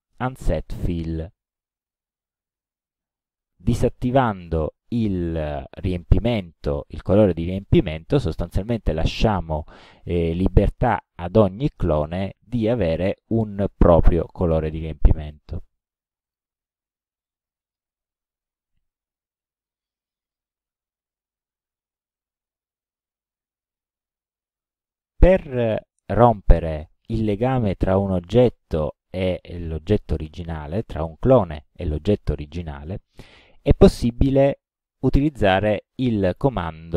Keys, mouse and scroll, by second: 1.9 click, 7.7 click, 8.9-9.6 drag, 10.6 click, 11.5 click, 12.6 click, 14.3 click, 15.3 click, 16.3 click, 17.3-18.0 middle drag, 22.8 click, 35.9 click.